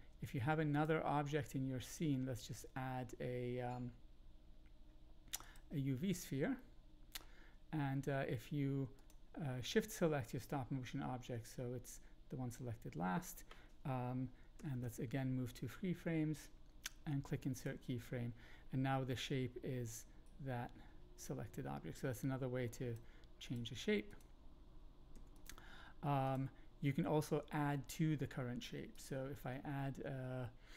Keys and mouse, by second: 0.7-5.5 drag, 6.5 shift+middle click, 6.6-7.2 shift+drag, 8.9 shift+click, 14.5 Right, 14.7 Right, 17.5 click, 19.8-22.9 drag, 23.5-24.1 drag, 25.1 x, 26.3-27.4 drag, 28.9 shift+click, 29.3 shift+a.